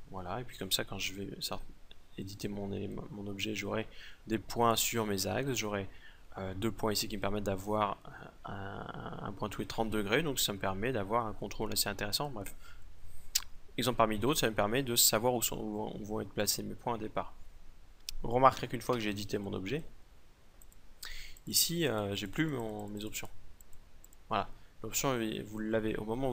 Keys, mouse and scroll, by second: 0.9 Tab, 18.5 Tab, 22.0-25.1 drag.